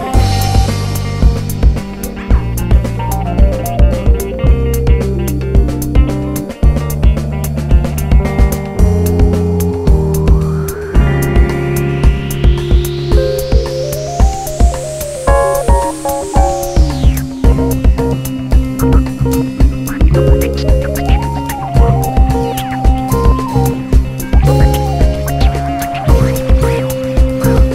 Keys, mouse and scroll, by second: 0.3 `, 0.8 Tab, 1.3-1.7 scroll up 2, 1.7 KP_1, 2.2 scroll up 2, 2.4 f, 2.7 1, 3.0 click, 3.3 g, 3.9 click, 4.4-6.9 typing, 4.5 click, 4.7 shift+click, 6.2 click, 7.7 click, 8.1-13.4 typing, 9.5 click, 10.7 click, 10.9 shift+click, 11.3 click, 11.5 shift+click, 13.1 click, 15.3 2, 15.5 click, 15.7 shift+click, 16.5 f, 16.9 a, 17.1 shift+click, 17.2 f, 17.7 click, 18.6 g, 19.3 alt+a, 19.7 scroll down 1, 19.9 scroll up 1, 20.1 Tab, 20.8 click, 22.5 KP_1, 23.1 scroll up 1, 23.4 2, 23.5 click, 24.0 f, 24.3 click, 25.3 2, 25.5 click, 26.2 f, 26.4 click, 27.0 f.